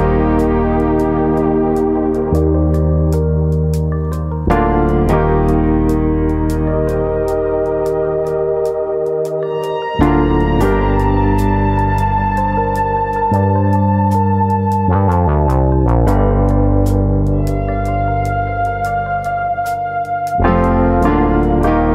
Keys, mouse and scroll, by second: 1.2 click, 1.4 alt+click, 2.4 click, 2.4 middle click, 2.6 middle click, 3.3 shift+click, 3.8 shift+click, 4.2 shift+click, 4.2 middle click, 4.5 ctrl+z, 5.4 shift+click, 5.8 middle click, 6.8 click, 7.7 middle click, 8.1 click, 8.7 alt+click, 9.3 click, 10.5 click, 10.6 alt+click, 11.8-12.7 scroll down 4, 12.2 middle click, 12.7 middle click, 13.9 KP_3, 14.7 scroll up 2, 14.9 middle click, 16.7 ctrl+r, 17.4 right click, 17.5 s, 18.3 click, 18.9 ctrl+KP_Add, 19.1 ctrl+KP_Add, 20.0 ctrl+KP_Add, 20.2 KP_3.